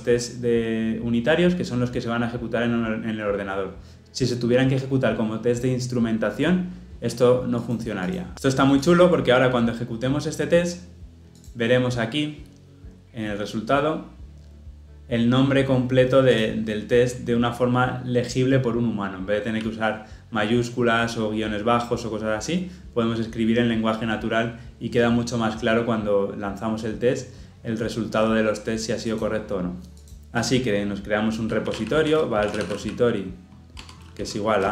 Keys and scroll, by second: 11.4 shift+F10, 33.8 Tab.